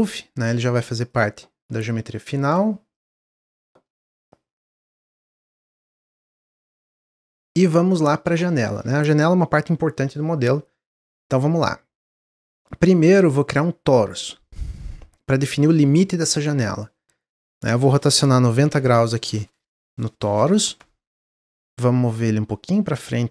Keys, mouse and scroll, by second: 0.2 click, 0.6-7.1 right drag, 7.1 click, 7.5-10.6 middle drag, 12.4-15.4 drag, 17.5-20.6 drag, 23.0-23.3 drag.